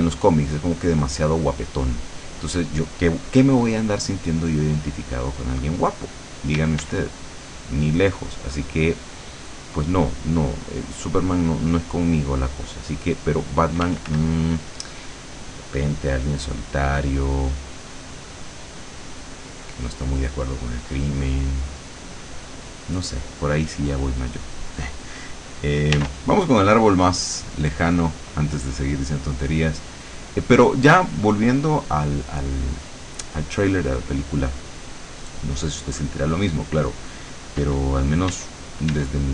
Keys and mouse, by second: 4.1 middle click, 6.6 d, 7.5 click, 10.0-11.3 drag, 11.5-14.0 drag, 13.9 f, 14.4-17.7 drag, 18.5-19.8 drag, 20.2-21.6 middle drag, 22.2-23.2 middle drag, 26.1 r, 28.2 click, 30.3 click, 31.3 click, 33.0 click, 35.0 middle click, 35.8 middle click, 38.4 d.